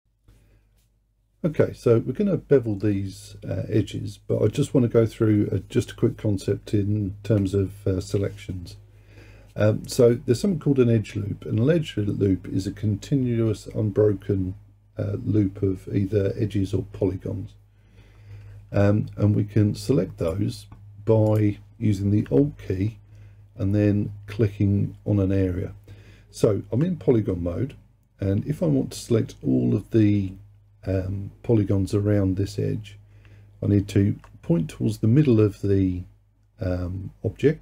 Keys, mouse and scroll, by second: 21.3-24.4 drag.